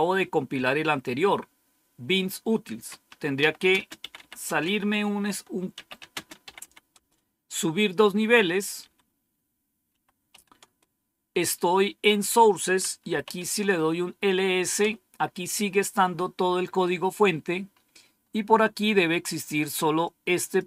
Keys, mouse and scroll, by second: 3.1-7.1 typing, 8.8 typing, 9.9-10.8 typing, 12.8-13.7 typing, 14.7 typing, 16.8-18.1 scroll up 1, 18.1-18.5 scroll up 1, 20.0-20.6 drag.